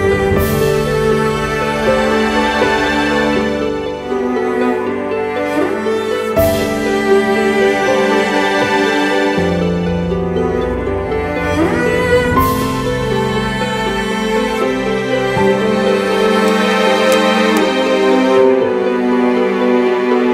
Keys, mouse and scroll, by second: 17.0 ctrl+t.